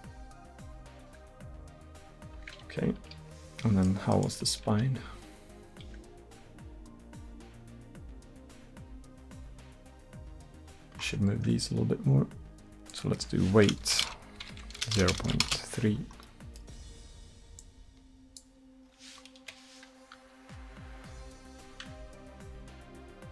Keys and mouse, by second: 3.9-4.7 right drag, 4.7 r, 11.1-12.9 middle drag, 12.9-15.0 drag, 14.1 BackSpace, 15.0 BackSpace, 15.1 BackSpace, 16.3 drag, 17.6-19.4 drag, 19.4 KP_1, 20.2 r.